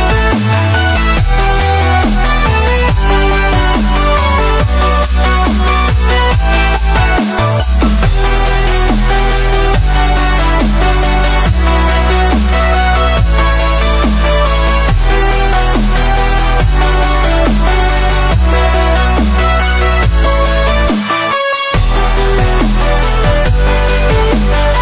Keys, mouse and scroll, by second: 1.0-2.3 scroll down 7, 1.1-1.4 middle drag, 1.6 click, 1.9 middle drag, 2.3-2.8 middle drag, 2.8 click, 3.0-4.1 shift+middle drag, 4.1 shift+a, 5.2 click, 5.5-5.9 middle drag, 5.9-6.9 drag, 7.5 shift+middle drag, 7.6 scroll up 3, 7.8-8.3 middle drag, 8.3 KP_1, 8.8 s, 10.4 s, 12.3-13.6 drag, 13.6 middle drag, 13.8-14.1 scroll down 3, 14.1-14.5 middle drag, 14.5-15.0 drag, 15.0-15.5 shift+middle drag, 15.5-15.9 drag, 15.9 shift+middle drag, 16.1 scroll down 1, 16.2 middle drag, 16.5 scroll up 3, 16.7-17.6 shift+middle drag, 17.6 scroll up 1, 17.8 middle drag, 18.0 click, 18.4 Tab, 18.7-20.3 drag, 20.8-23.6 drag, 23.6 right click, 24.3 ctrl+z, 24.4 ctrl+z.